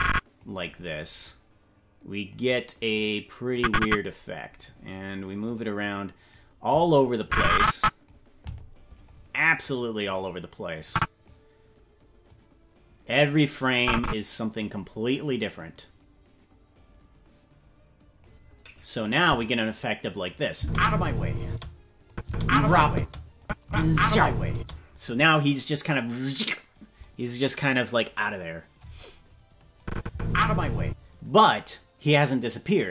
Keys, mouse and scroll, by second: 1.2-2.3 drag, 3.5 click, 5.4 click, 7.2 click, 9.0-10.1 drag, 10.8 click, 12.2 click, 13.7 click, 15.5-18.2 drag, 19.2 click, 20.5-24.5 typing, 22.1 click, 23.4 click, 29.8 click, 30.1 space, 30.8 space.